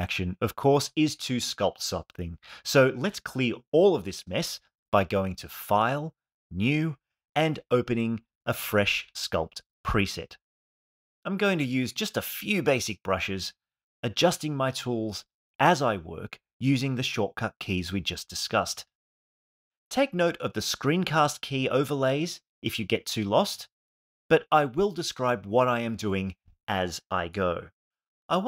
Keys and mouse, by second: 19.7 f.